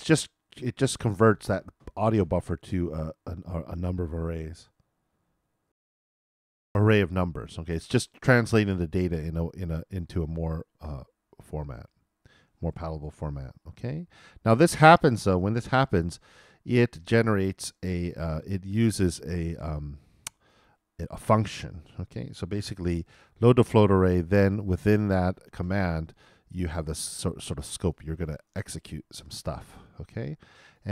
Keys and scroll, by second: 5.7 alt+i, 22.8-23.7 typing.